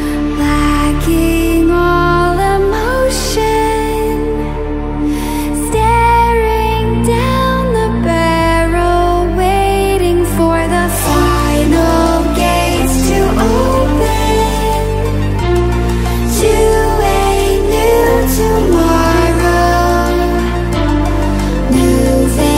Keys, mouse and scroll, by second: 13.5-13.9 ctrl+alt+scroll down 1, 14.4 ctrl+alt+scroll up 1, 15.7-18.2 drag, 18.4 ctrl+alt+scroll up 1, 19.8-20.7 drag, 22.2 ctrl+alt+scroll down 1.